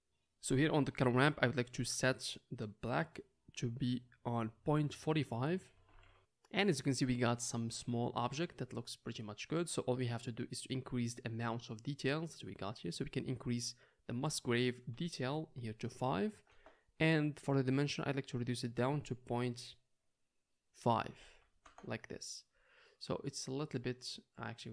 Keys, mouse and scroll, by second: 7.9-11.0 middle drag, 13.4 click, 13.4 middle click, 13.4 right click, 13.6 drag, 13.6 right drag, 23.4-23.9 drag, 23.4-24.7 middle drag, 23.4-23.9 right drag, 24.5 click, 24.5 right click.